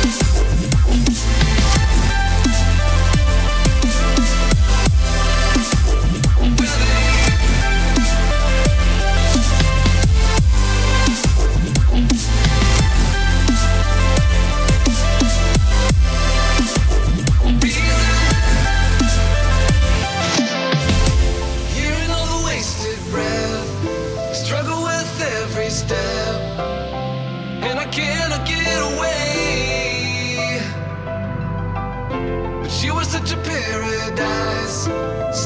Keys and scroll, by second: 2.2 -, 8.0 space, 14.3 space, 14.6 space, 15.9 space, 17.2 space, 18.9 space, 22.1 space, 23.0 space, 31.6 space, 33.4 -, 34.4 space.